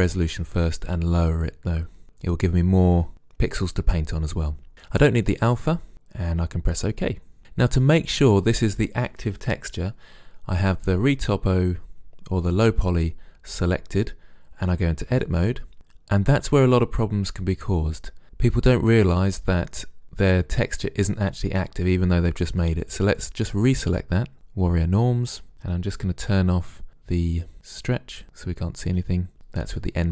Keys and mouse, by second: 15.1 Tab, 17.7-18.4 middle drag, 18.8-21.1 middle drag, 22.9-24.3 drag, 25.1-26.8 middle drag, 26.1 n, 28.2-29.3 drag, 29.0 n.